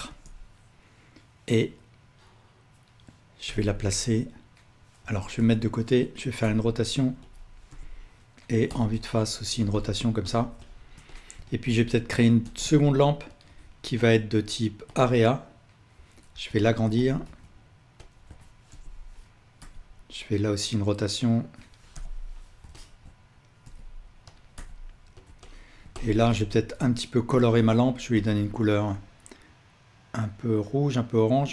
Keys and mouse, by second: 3.5 KP_7, 5.4-7.4 drag, 5.4 KP_3, 6.5 r, 7.7 KP_1, 8.7 r, 9.9-11.0 ctrl+alt+drag, 11.4-13.4 ctrl+alt+drag, 12.5 shift+d, 15.0 click, 16.4 s, 17.3 s, 18.7 KP_1, 19.6 r, 22.0 KP_7, 22.8-24.4 ctrl+alt+drag, 23.7 g, 24.6 r, 25.4-27.4 alt+drag, 26.8 s, 28.2 click.